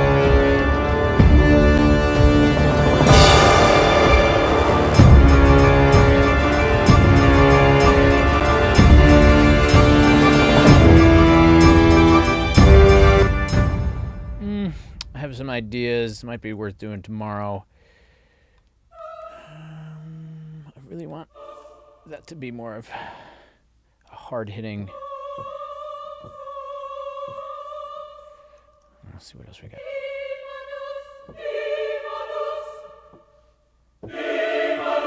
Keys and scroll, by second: 13.1 space, 28.8 Up.